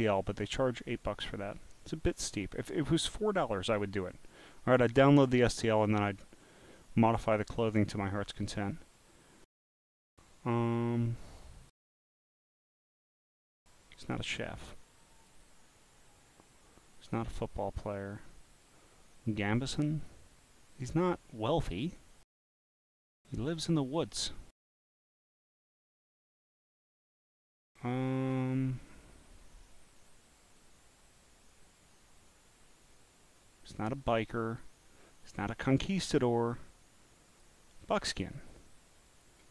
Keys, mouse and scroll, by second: 3.0 click, 3.6 click, 4.8 click, 5.6-6.0 scroll down 2, 6.7 scroll down 1, 7.6-8.5 scroll down 1, 8.5-9.1 scroll down 1, 9.1 scroll up 1, 11.0-11.5 scroll down 1, 14.0 click, 15.2 click, 18.5 click, 19.5 click, 21.7 click, 24.8 scroll up 1, 28.7 scroll up 1, 37.3 click, 37.9-39.2 drag.